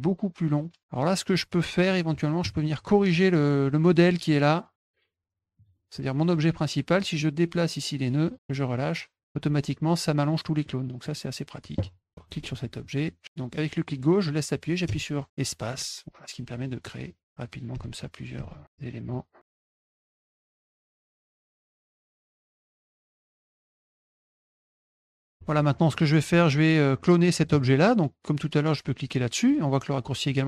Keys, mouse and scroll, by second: 1.9 middle click, 4.2 click, 5.5 click, 6.3 click, 7.5-8.9 drag, 10.6 middle click, 11.0 middle click, 12.8-18.6 drag, 14.8 space, 17.7 space, 19.0 click, 19.5 click, 19.5 click, 19.7 click, 20.0 click, 20.3 click, 20.5 ctrl+click, 20.7 click, 21.1 click, 21.4 ctrl+shift+click, 21.6 click, 21.9 click, 22.1 click, 22.3 click, 22.5 click, 22.6 click, 22.9 click, 23.3 ctrl+shift+drag, 23.4 drag, 23.8 click, 24.0 click, 24.1 click, 24.3 click, 24.4-24.8 drag, 25.0 click, 25.2 middle click, 25.3 middle click, 25.9 click, 26.4-27.2 drag.